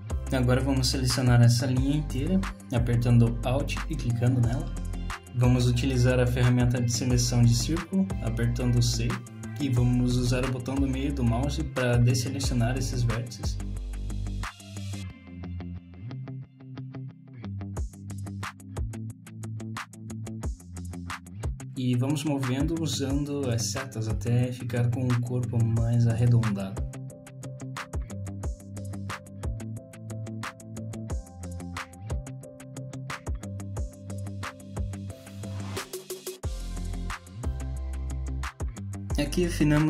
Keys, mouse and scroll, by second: 0.0 shift+middle click, 1.5 alt+click, 2.4 scroll down 1, 2.7 middle click, 6.0 middle click, 11.2 c, 17.7 middle click, 19.8 middle click, 21.1 ctrl+z, 21.4 shift+click, 22.1 middle click, 23.2 scroll up 1, 23.8-24.5 scroll up 1, 25.5 click, 27.3 click, 30.5 middle click, 34.6 middle click, 36.2 shift+middle click, 37.1 middle click, 38.2 click, 39.2 click.